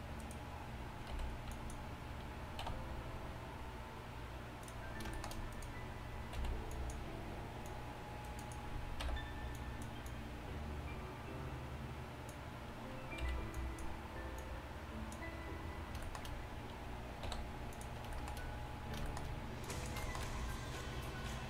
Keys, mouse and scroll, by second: 1.2 z, 2.7 b, 6.4-12.3 drag, 9.1 b, 12.3 x, 19.7 click.